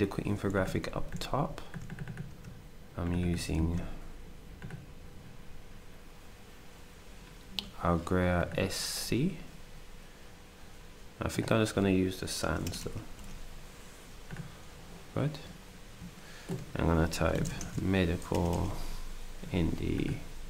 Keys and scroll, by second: 0.9 ctrl+d, 3.5 ctrl+a, 12.6 BackSpace, 12.8 BackSpace, 13.1 BackSpace, 17.5 ctrl+shift+m, 17.6 e, 18.3 BackSpace, 18.5 BackSpace.